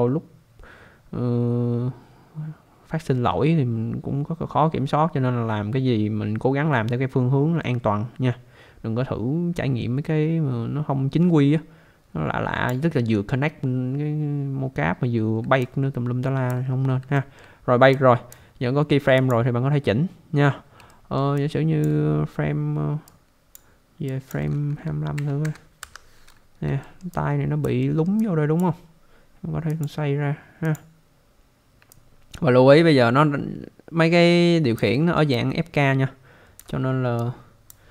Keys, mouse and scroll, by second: 15.6 alt+click, 16.7 scroll up 1, 17.1 alt+middle click, 18.0 click, 19.2 click, 20.9 alt+middle click, 21.3 alt+click, 23.0 click, 24.1 click, 25.1 typing, 25.8 Return, 26.8 alt+middle click, 27.1 alt+click, 27.8 alt+middle click, 28.1 alt+click, 29.7 click, 30.6 click, 31.9 alt+click, 35.0 alt+middle click, 35.3 alt+click, 37.2 click.